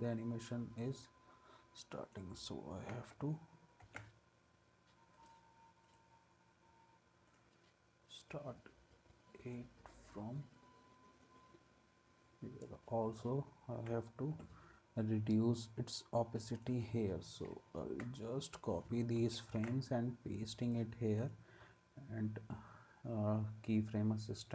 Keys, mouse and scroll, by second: 2.9 ctrl+c, 3.8 ctrl+v, 17.5 ctrl+z, 19.2 ctrl+c, 19.5 ctrl+v.